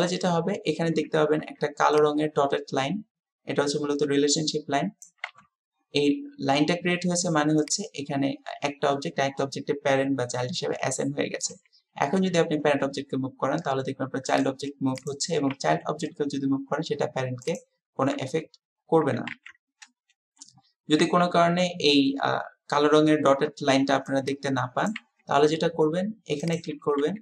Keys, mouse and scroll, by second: 7.6 click, 12.1 g, 15.5 g, 19.3 ctrl+z, 26.6 click.